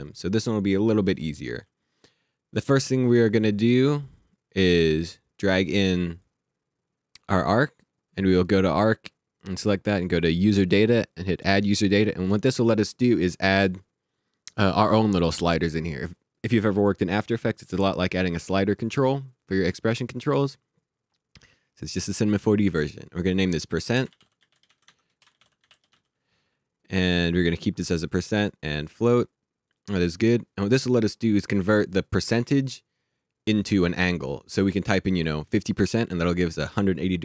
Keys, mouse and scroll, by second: 4.6 click, 8.0 click, 10.2 click, 15.5 click, 23.3 shift+Num_Lock, 23.7-26.4 typing, 28.8 click.